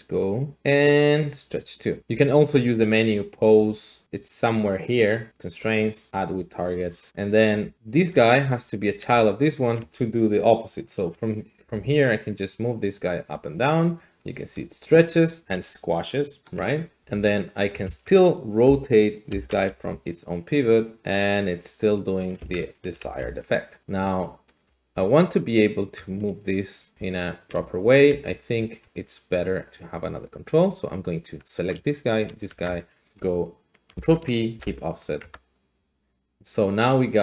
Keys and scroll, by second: 11.6 g, 17.0 r, 17.9 Escape, 19.2 Escape, 19.2 Escape, 19.7 Escape, 22.4 Escape, 23.0 alt+g, 24.6 g, 25.8 Escape, 28.1 g, 28.8 Escape, 32.5 Tab, 33.9 ctrl+p, 34.6 Return, 35.2 Tab.